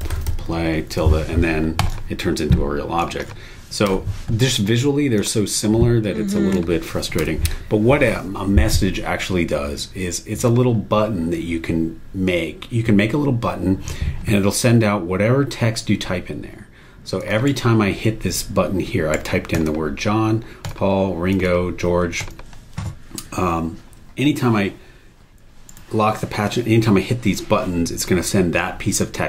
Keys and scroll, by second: 0.0-0.9 typing, 3.8 BackSpace, 7.2 BackSpace, 17.4 super+e, 19.1 super+e, 25.7 super+e.